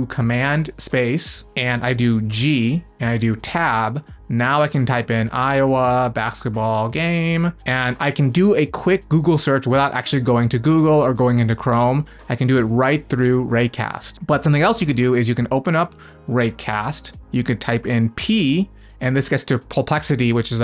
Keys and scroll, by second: 6.8-7.9 typing, 14.8 super+space.